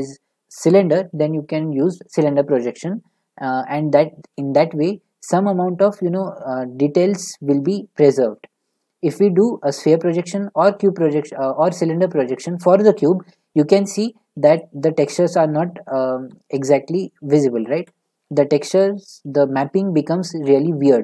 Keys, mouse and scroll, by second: 14.6-16.5 drag, 15.9-16.5 z, 17.2 z, 17.6 click, 17.8 z.